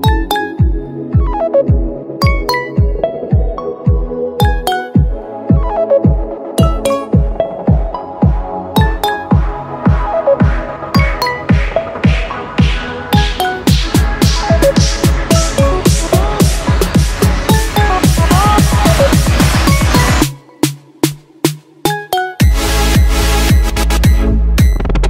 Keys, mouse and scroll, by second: 18.2 super+z, 18.6 super+z.